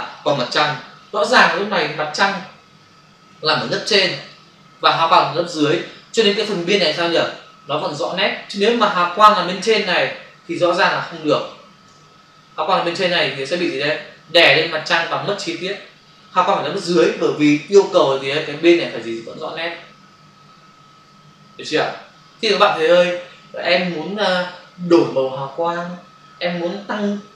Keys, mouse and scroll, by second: 4.2 click, 6.3 click, 6.8 ctrl+click, 8.9 click.